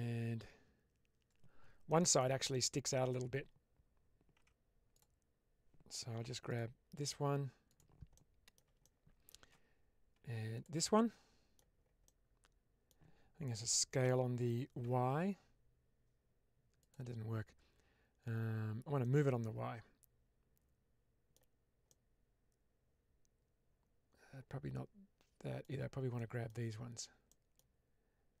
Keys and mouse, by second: 1.8 middle click, 2.4 middle click, 6.4 click, 6.4 2, 7.6 click, 8.0 middle click, 8.7 middle click, 10.4 shift+click, 10.8 middle click, 11.9 middle click, 13.9 s, 14.7 y, 16.7 click, 18.9-21.2 middle drag, 21.8-25.5 middle drag, 26.0 middle click, 27.2 middle click.